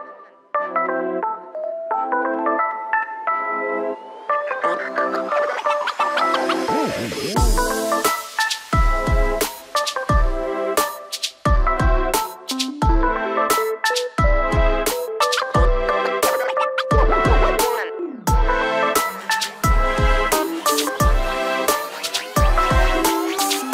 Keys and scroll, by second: 13.9 Return.